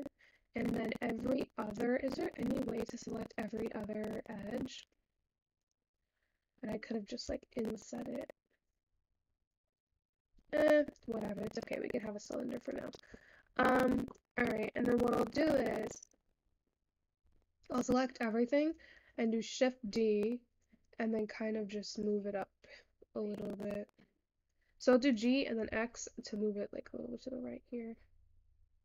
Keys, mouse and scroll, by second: 0.2-0.8 scroll up 6, 0.8-2.0 scroll down 2, 2.0 alt+click, 4.9-6.0 drag, 7.2 i, 11.0 Tab, 11.3-12.2 scroll down 11, 12.2-12.8 scroll up 8, 12.8-13.6 shift+scroll up 2, 13.0 shift+middle click, 13.6 scroll down 8, 13.9 shift+scroll up 1, 13.9 shift+middle click, 14.5-16.0 scroll up 1, 17.2 click, 19.3 shift+d.